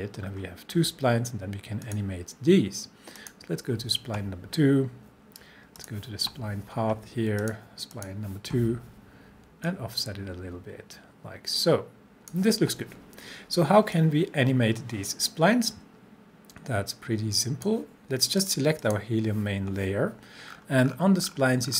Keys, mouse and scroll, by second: 1.8 click, 5.8-12.5 drag, 20.5 scroll down 1.